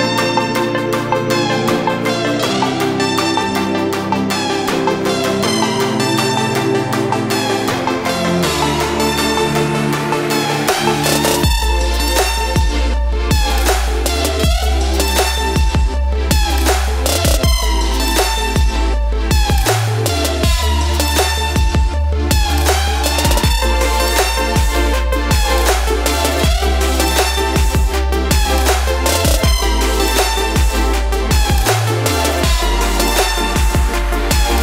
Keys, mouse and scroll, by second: 1.7 click, 3.1 4, 3.8 Return, 8.5-16.2 drag, 18.4 click, 23.8 click, 29.2 click.